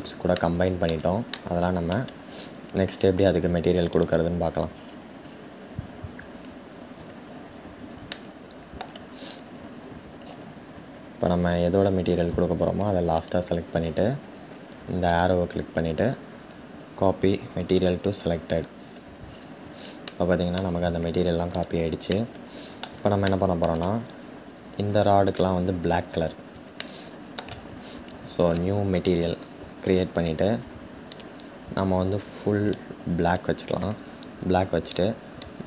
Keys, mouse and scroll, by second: 2.4-3.6 scroll up 7, 2.5-4.8 middle drag, 3.6 shift+click, 4.3-6.4 scroll down 8, 4.9-9.8 middle drag, 6.4-7.8 scroll down 1, 9.8-11.4 scroll up 7, 11.4-12.9 scroll up 4, 11.5-12.9 middle drag, 12.9 shift+click, 17.5 click, 18.4-19.6 scroll down 10, 19.6-20.4 shift+middle drag, 20.4-21.2 scroll down 1, 21.2-21.9 drag, 21.9-25.0 middle drag, 25.0 click, 25.6-26.5 scroll up 5, 26.5-28.8 shift+middle drag, 28.8-32.3 drag, 35.2-35.6 drag.